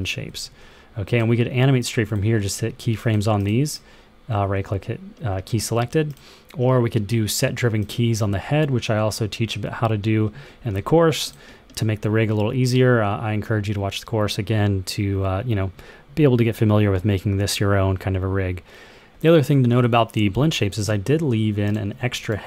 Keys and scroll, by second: 0.2 super+z.